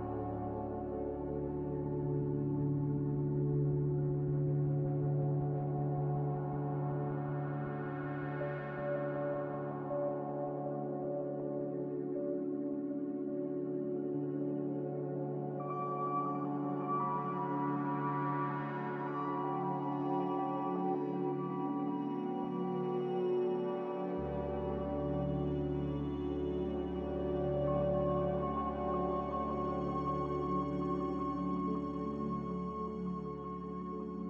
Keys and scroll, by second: 21.9 h, 22.3 Escape, 22.5 Escape, 29.0-29.5 typing, 29.5 Return.